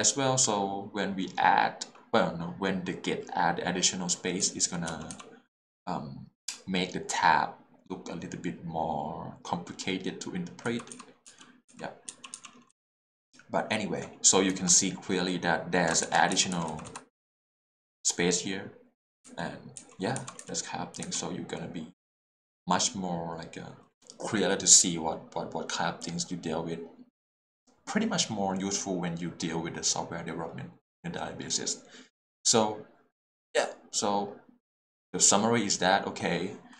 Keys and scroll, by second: 4.4 l, 4.9 h, 10.6-12.7 typing, 16.0 shift+4, 16.4 h, 16.7 l, 19.2 j, 19.8 k, 20.2 j.